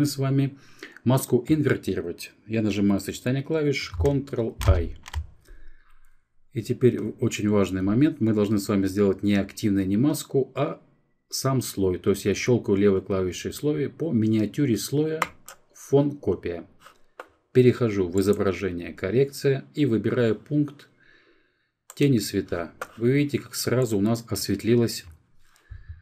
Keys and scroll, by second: 3.4 ctrl+i.